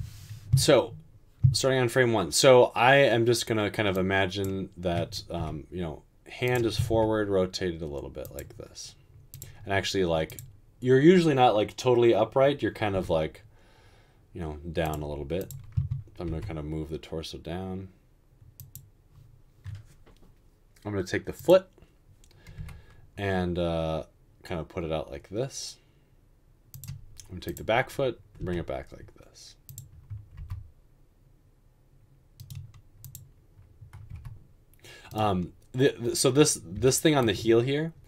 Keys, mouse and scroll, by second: 5.6 typing, 6.9 typing, 13.1 typing, 16.2 typing, 22.7 typing, 28.6 typing, 30.3 typing.